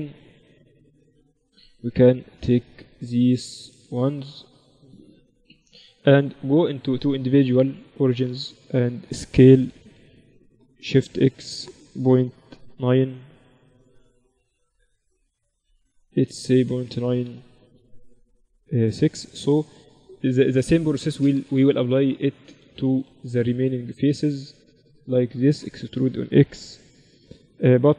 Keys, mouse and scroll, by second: 0.0-6.2 middle drag, 1.9-8.1 right drag, 6.5-8.3 drag, 9.7 s, 19.4 middle click, 20.1-26.7 right drag, 22.8 a, 26.5 e, 26.7 click.